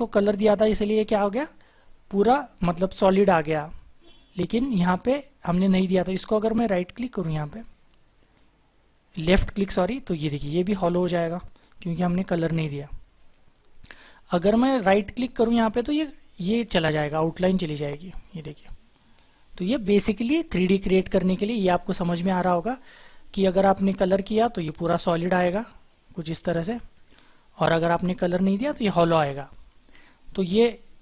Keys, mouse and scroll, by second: 11.6 double click, 13.1-13.8 scroll up 1, 13.8-15.8 scroll down 1, 15.8 right click, 27.5 ctrl+z.